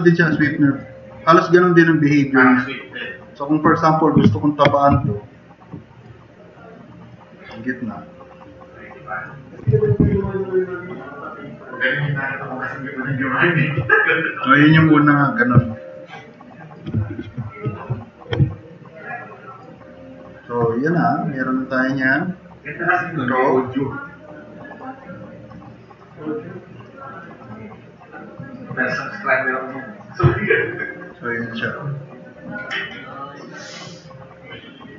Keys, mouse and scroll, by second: 10.2-11.8 drag, 17.2 ctrl+z, 17.7 ctrl+z, 30.5-31.7 drag, 33.0 middle click, 33.2 drag, 34.7-34.9 drag.